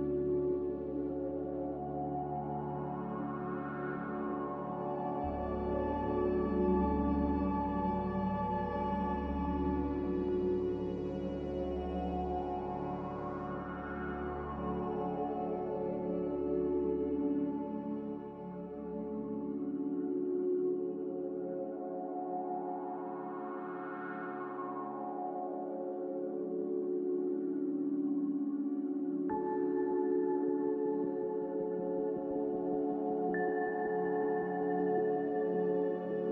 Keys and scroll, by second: 7.4 ctrl+j, 15.3 ctrl+k, 32.2 x, 34.1-35.2 typing.